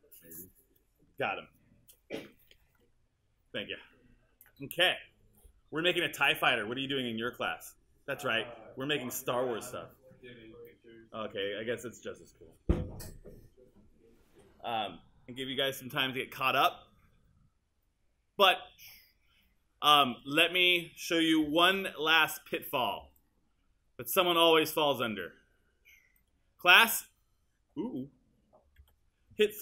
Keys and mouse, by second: 28.8 super+z.